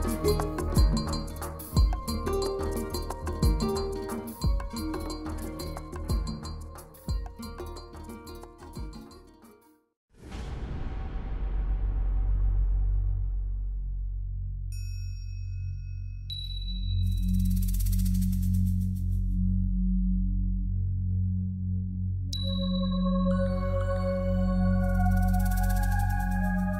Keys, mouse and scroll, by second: 0.1 z, 0.4 middle click, 1.8 z, 1.9 middle click, 3.0-3.4 scroll up 4, 3.4 shift+middle click, 3.9 middle click, 4.1 shift+middle click, 5.1 Tab, 5.8 middle click, 6.1 shift+middle click, 7.4 KP_7, 7.6 scroll down 6, 8.0 shift+middle click, 8.4 scroll up 4, 8.6 shift+middle click, 9.6 ctrl+middle click, 10.4 shift+middle click, 11.9 a, 12.4 c, 16.9 right click, 17.4 ctrl+z, 18.1 c, 21.9 right click, 22.0 a, 22.6 c.